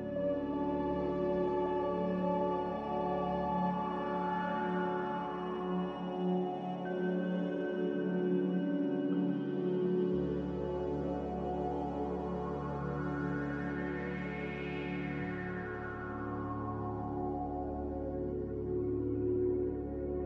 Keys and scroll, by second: 9.6 q.